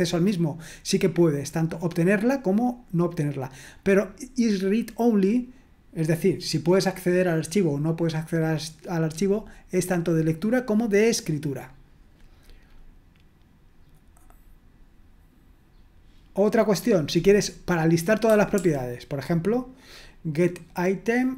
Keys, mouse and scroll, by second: 11.5-12.7 scroll down 2, 12.7-13.6 scroll up 2, 14.1-14.9 scroll up 1, 16.7-17.7 drag, 18.5 ctrl+p.